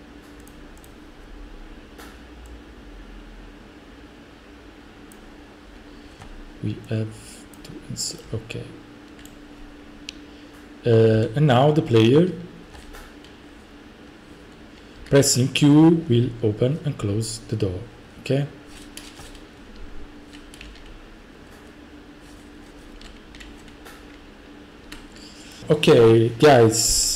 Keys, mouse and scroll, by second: 0.5-0.9 drag, 5.1 click, 7.6 click, 8.3-9.2 typing, 9.3 right click, 10.2 right click, 11.1 F5, 12.8-15.0 typing, 17.1-18.7 typing, 19.8-23.4 typing, 25.6 middle click.